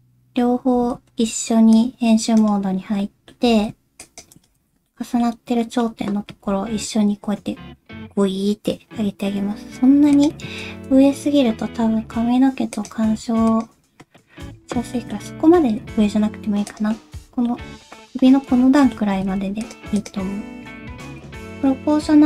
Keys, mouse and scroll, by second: 0.5 scroll up 1, 0.8 alt+a, 1.1 c, 3.0 middle click, 3.4 c, 4.6 alt+z, 4.9 middle click, 5.6 middle click, 6.2 g, 10.6 ctrl+space, 12.7 click, 13.5 click, 14.1 middle click, 14.9 shift+middle click, 15.3 middle click, 15.8 g, 16.9 middle click, 18.8 middle click, 19.1 g, 20.0 click, 20.6 scroll up 1, 20.9 alt+z, 21.4 alt+a, 21.4 click, 21.4 o.